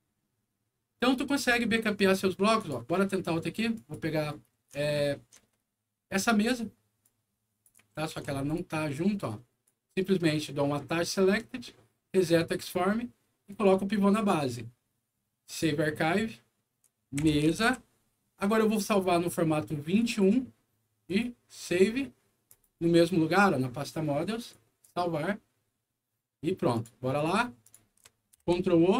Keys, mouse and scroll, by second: 2.5 alt+click, 3.7 alt+click, 4.7 alt+middle click, 5.7-6.1 scroll up 1, 6.1 alt+middle click, 6.9 alt+click, 7.9 ctrl+z, 8.4 click, 8.9 click, 10.8 click, 12.2 click, 13.4 click, 15.4 click, 16.9-18.1 typing, 18.5 click, 19.9 click, 21.0 click, 22.4 click, 24.4 click, 26.6 click, 27.5 click.